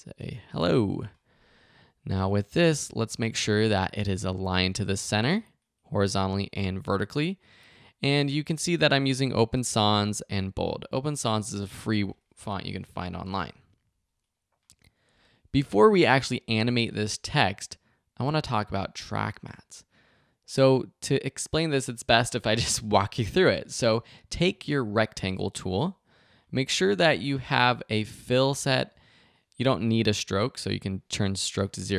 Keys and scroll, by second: 0.0-0.3 typing, 13.9 v.